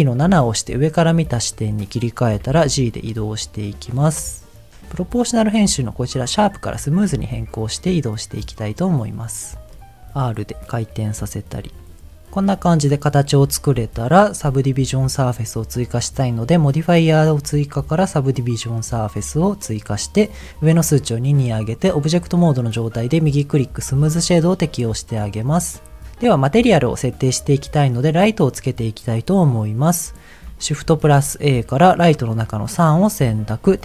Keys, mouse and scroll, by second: 0.5 KP_7, 1.4 shift+middle click, 2.4 g, 3.1-3.4 scroll down 1, 5.3-6.7 drag, 7.1 g, 8.3-8.9 scroll down 1, 8.9-9.4 scroll down 1, 9.4 click, 9.7 middle click, 10.0 r, 11.1 click, 11.8 middle click, 12.3 middle click, 13.4-14.3 scroll down 1, 20.3 click, 22.7-23.8 right drag, 23.9 ctrl+s, 24.4 click, 24.7 middle click, 25.6 scroll down 1, 26.3-27.9 middle drag, 30.8 shift+a, 33.0-33.8 scroll down 1.